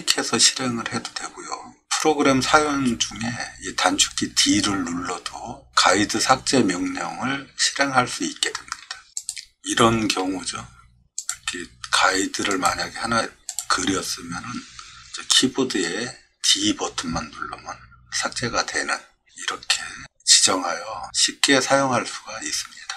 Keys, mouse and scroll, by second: 9.2 click, 11.2 click, 12.5 click, 13.5 click, 16.4 d.